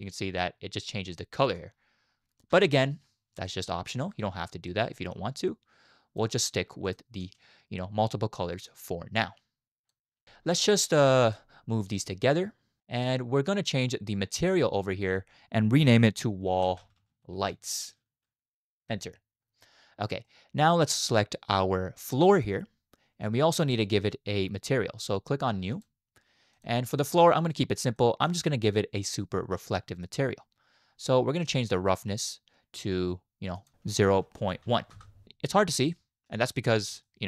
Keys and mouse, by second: 1.1-1.6 middle drag, 2.5 space, 3.5-4.1 middle drag, 4.8 middle click, 5.7 click, 7.2 x, 9.0-10.0 drag, 10.9-11.3 drag, 11.9 g, 14.4-18.9 drag, 16.9 l, 20.3 middle click, 22.3 click, 25.8 click, 26.5 click, 28.0-28.3 middle drag, 33.6-35.0 drag, 35.9 shift+click, 36.5-36.8 middle drag, 37.0 shift+middle drag, 37.1 shift+drag.